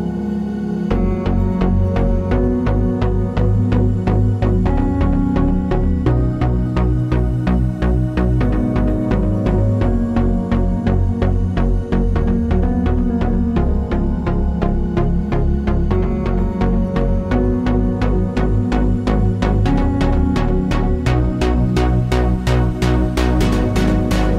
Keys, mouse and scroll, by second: 2.9-5.2 typing, 5.9 Return, 7.6 click, 8.7 Delete, 13.0 right click, 14.5 click, 20.9 v, 21.5 click, 23.0-23.4 typing, 23.8 Return.